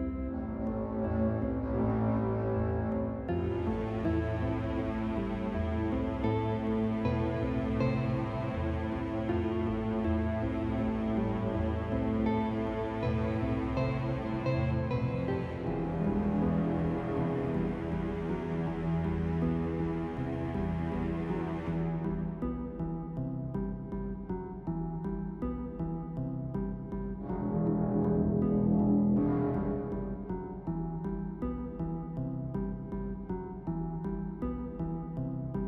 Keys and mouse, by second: 3.9 s, 5.6 s, 6.0 s, 7.8 middle click, 8.5 p, 9.8 click, 10.5 middle click, 11.0 Tab, 12.0-13.0 middle drag, 13.2-15.7 middle drag, 15.7 Tab, 16.8 click, 17.9-20.2 right drag, 21.1-23.7 drag, 23.3 right click, 24.0 click, 26.9 ctrl+r, 28.2 ctrl+r, 29.5 ctrl+r, 31.5 ctrl+r, 33.8-35.0 right drag, 35.5 click.